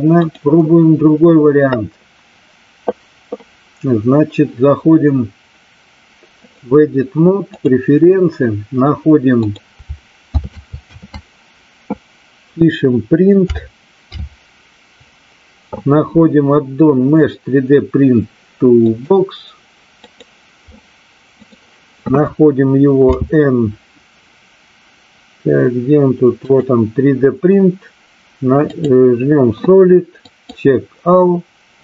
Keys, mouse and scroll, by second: 0.1 click, 6.5-8.0 drag, 23.0 n, 26.4 click, 30.1 click.